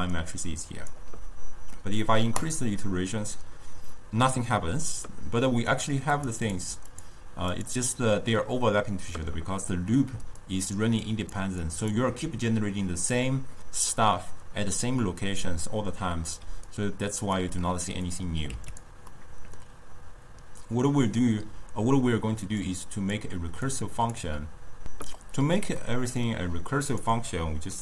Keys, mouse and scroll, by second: 0.0-2.0 typing, 0.2 click, 2.5-5.5 drag, 5.8-10.2 drag, 10.2-12.7 typing, 10.5 click, 11.1 click, 11.7 click, 16.5 d, 16.7 right click, 17.5 d, 18.0 d, 18.2 click, 19.2-22.2 middle drag, 22.7 click, 23.8 click, 25.8-26.9 middle drag, 26.9 click.